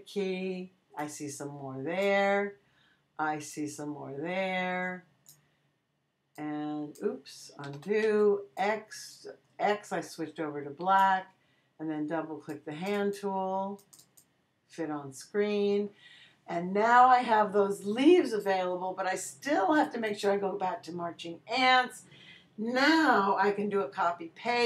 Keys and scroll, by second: 7.6 super+z, 8.0 super+x, 8.7 x.